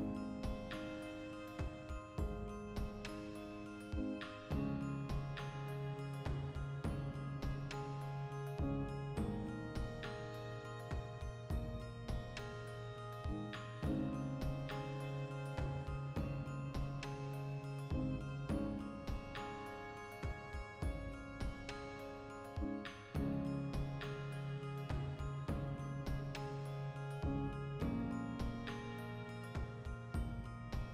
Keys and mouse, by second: 0.6 Tab, 1.7 1, 1.9 right click, 2.9 click, 3.7 shift+s, 5.0 click, 5.4 Tab, 5.7-6.8 drag, 6.8 shift+middle click, 7.7-11.3 drag, 11.3 Tab, 11.5 shift+middle click, 11.9 2, 12.4-13.5 right drag, 13.5 e, 14.0 click, 14.8 e, 15.2 click, 15.3 ctrl+middle click, 16.0-18.3 ctrl+right drag, 19.1 click, 19.3-22.2 typing, 19.7 click, 20.4 click, 21.0 right click, 21.9 click, 22.0 right click, 22.6 click, 22.8 right click, 23.2 g, 23.7 click, 23.9 right click, 24.3 g, 24.7 click, 25.0 2, 25.1 right click, 25.5 f, 25.7 shift+middle click, 26.1 right click, 26.3-29.3 ctrl+middle drag, 28.6 ctrl+r, 29.3 right click, 29.8 ctrl+r, 30.0 right click.